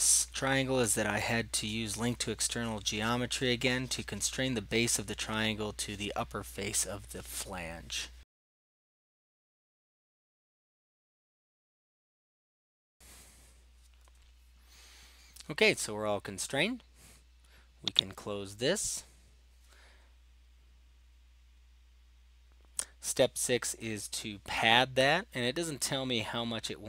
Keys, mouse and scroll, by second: 0.3 typing, 0.8 Delete, 0.9 Delete, 1.1 click, 1.7 click, 2.0 click, 2.4 typing, 2.7 Return, 3.2 click, 3.7 typing, 3.9 Return, 5.5 click, 5.8 right drag, 6.4 click, 6.9 click, 7.4 click, 8.2 click, 8.6 click, 9.4 typing, 10.3 right click, 10.6 click, 10.9 click, 11.8 right click, 12.1 click, 12.6 click, 12.9 click, 18.1-19.1 drag, 21.3-22.8 middle drag, 21.3-21.8 scroll, 25.7-26.2 scroll, 26.2-26.8 scroll down 2.